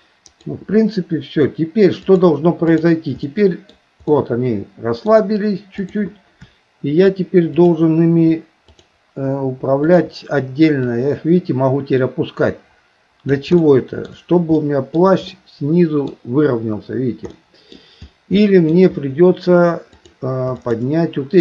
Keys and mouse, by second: 0.3 click, 2.0 click, 3.3 middle click, 4.1 middle click, 5.8 click, 7.5 click, 8.7 shift+click, 9.8 shift+click, 10.8-13.5 drag, 13.6 shift+middle click, 14.6 middle click, 15.3 middle click, 17.3 middle click, 18.4 shift+middle click, 20.6 shift+click.